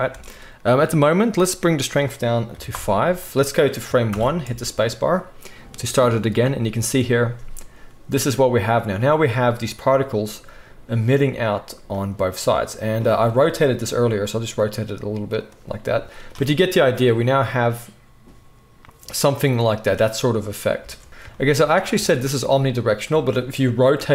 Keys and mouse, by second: 0.1 space, 0.9 middle click, 1.7-12.0 drag, 4.1 shift+Left, 4.4 space, 12.0 middle click, 12.5 drag, 12.9-15.4 drag, 13.9 r, 20.8 space, 21.9 space, 24.0 r.